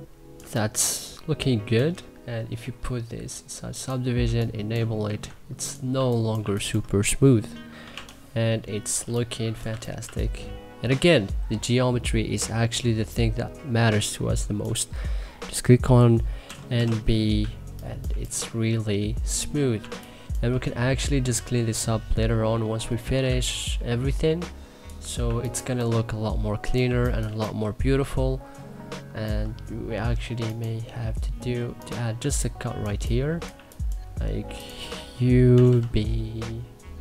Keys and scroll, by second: 3.8 3, 4.6 e, 5.6 2, 6.0 1, 7.2-9.7 typing, 16.1 n, 16.4 b, 17.0 2, 20.0 1, 22.9 2, 24.9 1, 25.3 3, 26.4 1, 26.9 3, 31.8 2, 33.2 1, 34.9-35.8 typing.